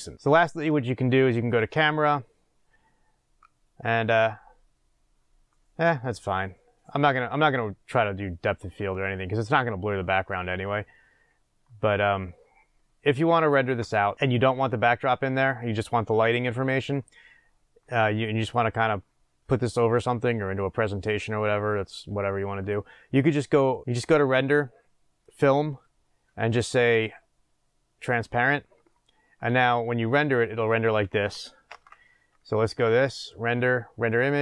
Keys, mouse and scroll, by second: 1.4 click, 23.7 click, 32.0 s, 34.3 click.